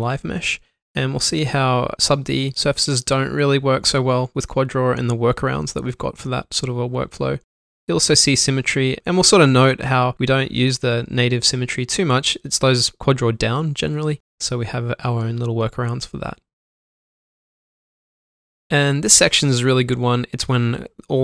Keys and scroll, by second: 2.5 ctrl+shift+q, 5.7 Tab, 8.2 Tab, 9.6 Tab, 10.3 shift+Num_Lock, 11.5 typing, 12.6 alt+q, 13.5 alt+shift+d, 14.1 alt+2, 14.2 1, 15.2 shift+m, 16.2 ctrl+shift+q, 20.3 alt+m.